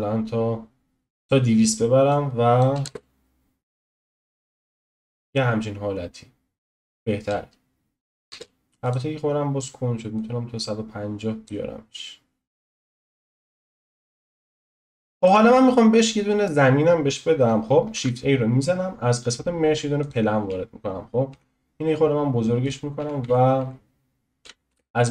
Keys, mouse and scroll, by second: 2.1-2.8 drag, 2.8 space, 8.3 space, 8.8-14.6 drag, 14.6-15.2 scroll up 3, 15.2-16.3 middle drag, 16.3-20.1 scroll down 1, 20.1 shift+a, 21.3 s, 23.0 s, 23.0 s.